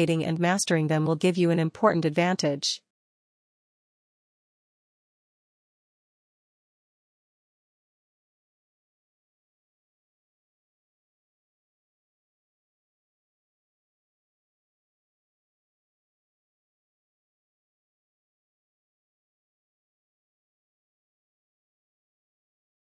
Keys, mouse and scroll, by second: 0.0-1.4 typing, 3.1 click, 3.3 click, 3.5 click, 3.7 click, 18.1 click.